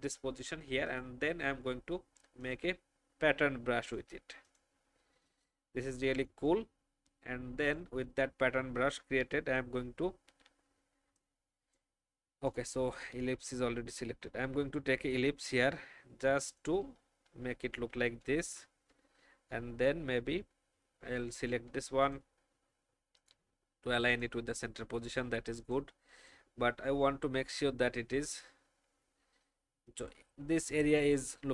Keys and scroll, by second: 9.2 Delete, 17.2 alt+shift+x, 17.7 alt+shift+v, 18.4 alt+shift+Left, 27.0 shift+Down.